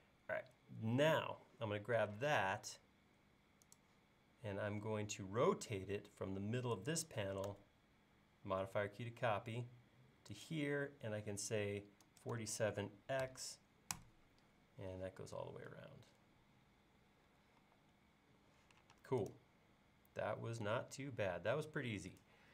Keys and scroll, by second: 2.3 q, 12.1 typing, 17.7 e, 19.0 space.